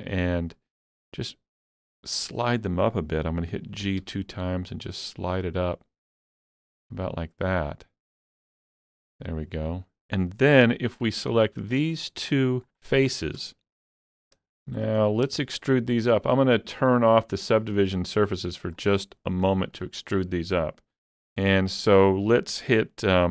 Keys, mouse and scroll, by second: 0.3 shift+middle click, 3.8 g, 4.0 g, 9.1 click, 10.6 3, 11.0 click, 11.9 middle click, 13.1 shift+middle click, 13.8 alt+z, 14.0-14.5 scroll up 1, 14.7 shift+middle click, 15.4 shift+middle click, 17.8 click, 18.5 shift+middle click, 20.1 middle click.